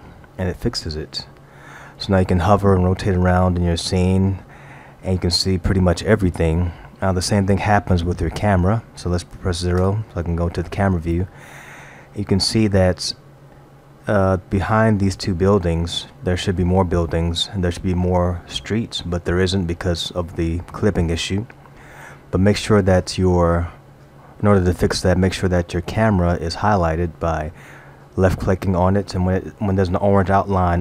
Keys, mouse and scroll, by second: 0.8 middle click, 5.5 middle click, 9.8 KP_0.